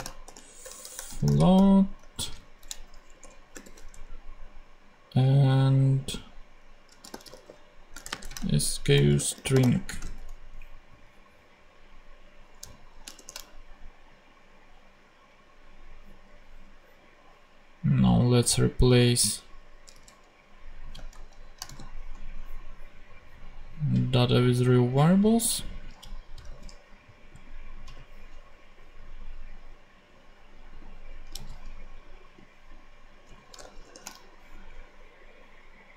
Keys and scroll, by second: 0.0-2.3 typing, 3.1 shift+Return, 3.6 shift+4, 7.0-10.4 typing, 13.1 shift+super+p, 19.9 super+c, 20.9 shift+super+c, 21.1 shift+super+Right, 21.6 shift+super+v, 22.6 super+v, 26.4 super+c, 31.3 super+c, 33.6 shift+super+v, 33.8 shift+super+p.